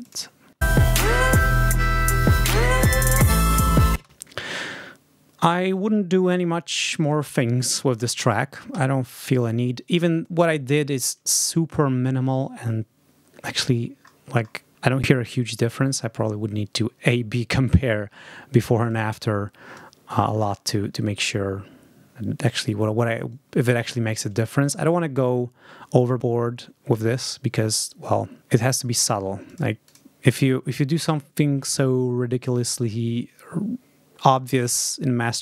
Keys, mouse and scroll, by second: 0.5 space, 3.8 space, 8.6 ctrl+s, 13.4 ctrl+scroll up 2, 14.7 scroll up 2, 18.7 click, 21.1 click, 21.7 scroll up 2, 22.5 click, 22.9 click, 23.1 click, 23.8 scroll up 2, 24.4 ctrl+scroll down 2, 25.1-25.7 ctrl+scroll up 5, 26.0 scroll up 2, 26.8 click, 27.2 scroll up 2, 28.4 scroll up 2, 29.4 click, 29.8 click.